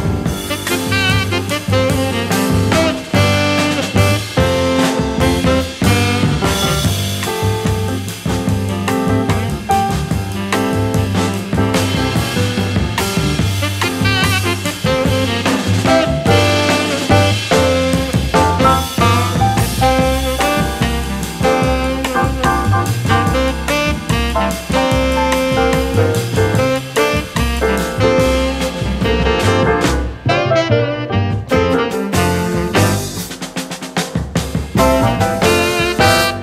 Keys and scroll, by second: 8.0 a, 10.2 v, 12.3 a, 15.6 v, 19.5 a, 21.2 v, 23.5 k, 25.0 shift+x, 26.8 v, 29.8 super+s.